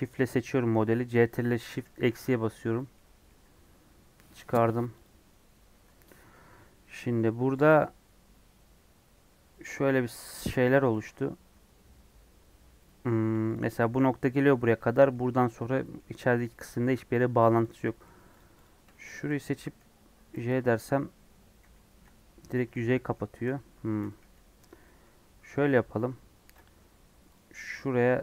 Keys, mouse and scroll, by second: 0.0 shift+click, 1.7 ctrl+shift+KP_Subtract, 2.9 middle click, 3.4 scroll up 2, 4.9 click, 5.7 Tab, 7.2-9.7 middle drag, 9.7 scroll up 2, 10.1 middle click, 10.9 ctrl+r, 13.1 1, 13.5 click, 13.9 click, 14.7-17.7 middle drag, 17.7 ctrl+click, 18.6 click, 19.1 shift+click, 19.6 j, 20.3 ctrl+z, 20.6 middle click, 21.5 j, 21.8 middle click, 22.7 ctrl+z, 22.9 middle click, 23.7 scroll down 2, 23.9 a, 24.8 middle click, 25.0-26.0 scroll up 3, 25.5 middle click, 26.3 ctrl+r.